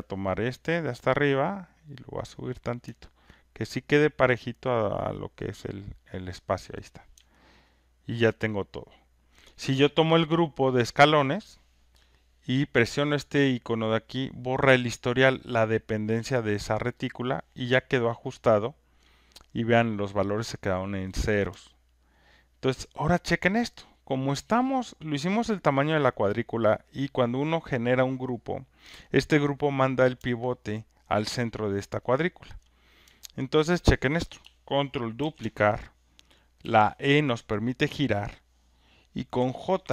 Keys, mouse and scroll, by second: 0.6 click, 2.4 click, 3.2 alt+click, 5.4 click, 6.8 click, 7.6 alt+right click, 9.2 alt+click, 10.8 click, 17.1 click, 18.2 alt+right click, 19.0 alt+click, 21.9 alt+right click, 23.2 alt+click, 23.8 alt+right click, 25.1 alt+click, 28.7 alt+click, 31.7 alt+click, 32.6 alt+click, 33.6 alt+click, 35.2 ctrl+d, 39.1-39.9 typing.